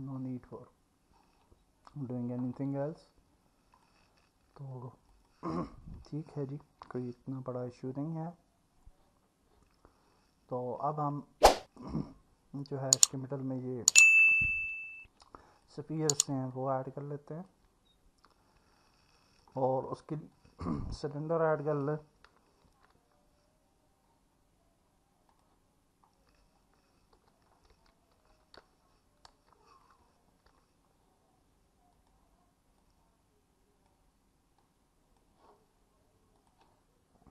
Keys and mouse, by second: 0.0 Tab, 2.6 Tab, 3.8-5.5 drag, 7.1 alt+middle click, 7.8-13.0 alt+middle drag, 14.8 click, 15.5 middle click, 16.5-17.5 alt+middle drag, 18.8-19.3 alt+middle drag, 21.7 middle click, 22.7 shift+a, 27.2 r, 27.7 x, 28.3 KP_9, 28.6 KP_0, 29.3 Return, 30.5 s, 34.6 click, 36.4 click.